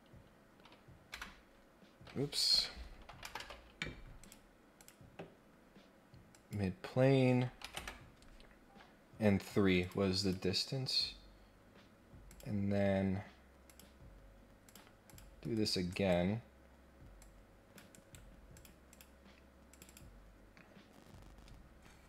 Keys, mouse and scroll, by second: 4.2 click, 4.7 click, 6.3 click, 8.7 scroll down 1, 9.8 click, 10.2 click, 12.3 click, 13.7 click, 14.6 click, 15.1 click, 15.9 right click, 17.2 click, 17.9 right click, 18.5 click, 18.9 click, 19.7 click.